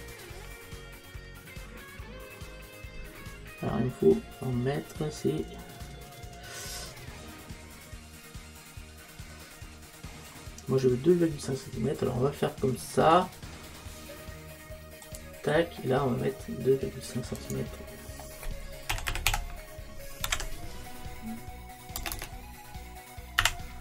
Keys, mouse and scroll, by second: 15.2 click, 17.4 click, 22.2 BackSpace.